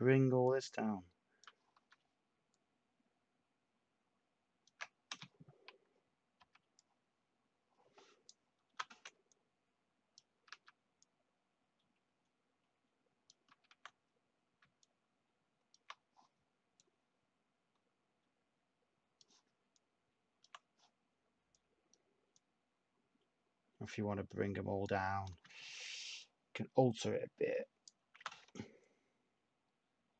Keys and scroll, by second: 1.7 ctrl+z, 5.1 t, 8.6 /, 10.4 ctrl+z, 13.4 ctrl+z, 25.9 /, 28.1 t.